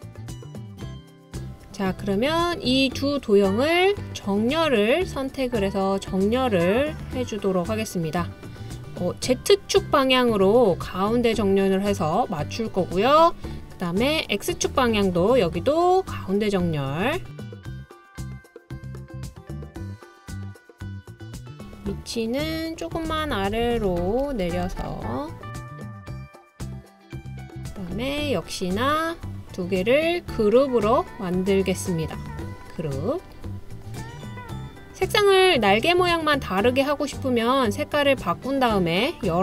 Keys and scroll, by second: 22.7 Page_Down, 22.9 Page_Down, 23.1 Page_Down, 23.3 Page_Down, 23.5 Page_Down, 23.6 Page_Down.